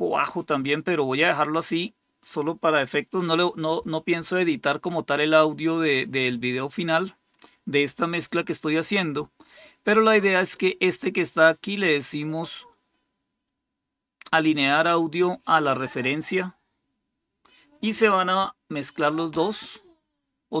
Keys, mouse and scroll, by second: 10.2 click, 12.1 right click, 15.7 click.